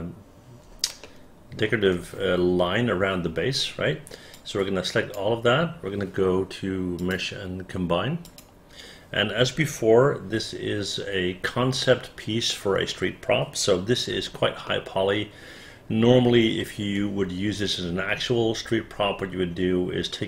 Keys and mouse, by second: 1.2 alt+middle click, 4.5 click, 14.8-16.6 alt+middle drag.